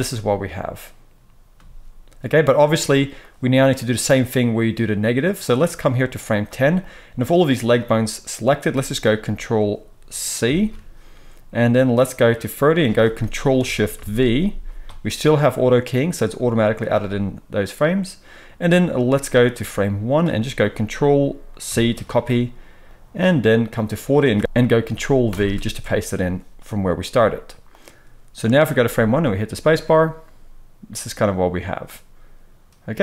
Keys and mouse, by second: 1.5 space, 10.4 ctrl+c, 13.9 ctrl+shift+v, 21.6 ctrl+c, 25.3 ctrl+v, 28.8 space.